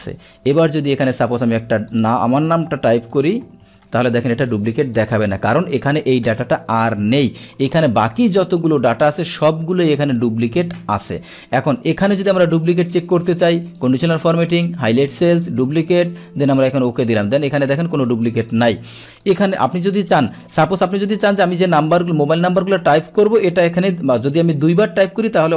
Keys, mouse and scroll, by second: 0.1-2.0 scroll down 1, 2.0 click, 3.9 Return, 5.0 click, 8.9-12.0 middle drag, 12.0 click, 12.9 click, 13.7 click, 14.6 click, 15.4 click, 16.9 click, 17.5 drag, 18.6 click, 19.3 click, 20.1 click, 21.1 click, 22.8 click.